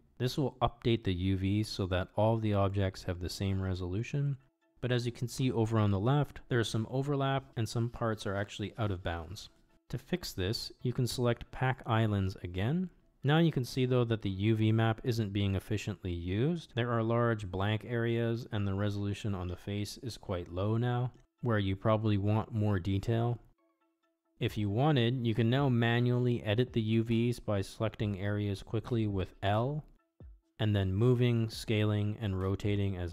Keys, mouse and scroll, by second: 7.1-8.9 drag, 12.9-14.4 middle drag, 18.2 click, 19.0-22.4 middle drag, 25.3 click, 28.3 l, 30.0 middle click, 30.2-31.2 drag, 32.7 shift+click.